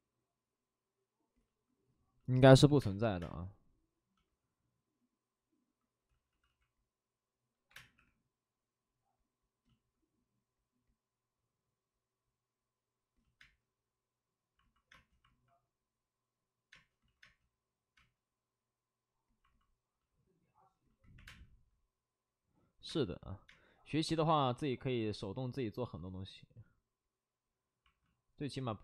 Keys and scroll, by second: 2.6 3, 2.7 space, 3.1 3, 6.0 ctrl+z, 6.0 space, 7.6 ctrl+z, 7.6 3, 7.6 space, 7.9 3, 13.4 space, 14.9 space, 16.7 space, 16.9 ctrl+z, 17.2 space, 21.1 3, 22.8 space, 23.7 space, 28.6 alt+s.